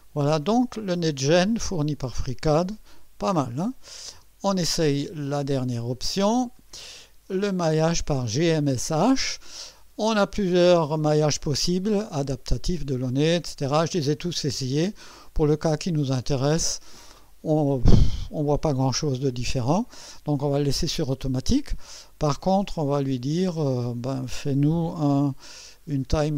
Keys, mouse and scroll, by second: 0.8 scroll down 2, 1.3-2.1 right drag, 3.7 click, 4.2 space, 4.9 click, 6.6 click, 8.3 click, 10.4 click, 16.4 click, 22.8 click, 26.0 KP_5.